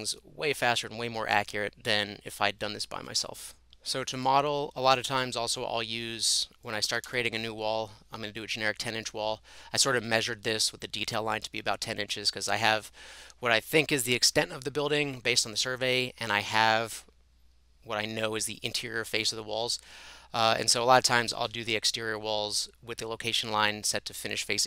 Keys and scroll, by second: 6.6-7.6 typing, 8.9-9.6 typing.